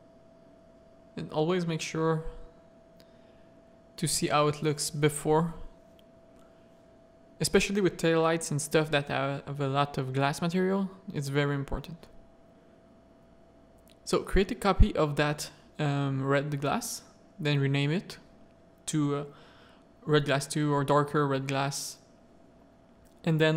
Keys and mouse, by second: 0.1 click, 1.9-2.9 middle drag, 4.0 middle click, 5.5 z, 6.1 click, 6.3 z, 6.7 middle click, 7.1 Tab, 7.7 3, 10.8-12.8 drag, 14.2 click, 14.8-19.5 drag, 18.5 s, 20.5 drag.